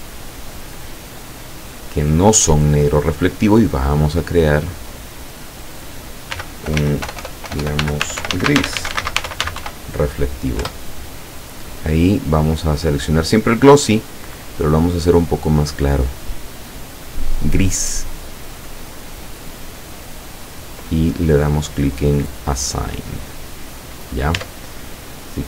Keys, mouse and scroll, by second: 0.1 shift+right click, 0.7 shift+right click, 1.3 shift+right click, 1.7 shift+right click, 2.1 shift+right click, 3.9 click, 6.4-9.7 typing, 10.7 Return, 12.6 click, 14.0-17.6 drag, 22.5 click, 24.0 scroll down 1, 24.4 Tab, 25.0 scroll down 1.